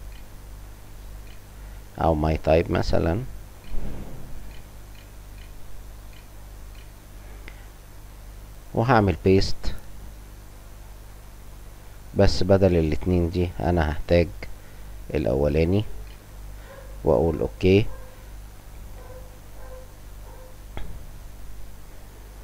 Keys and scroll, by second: 0.0-1.2 typing, 2.6-6.7 typing, 14.8-16.2 typing, 18.5 Home, 19.5 Scroll_Lock, 19.7 Pause.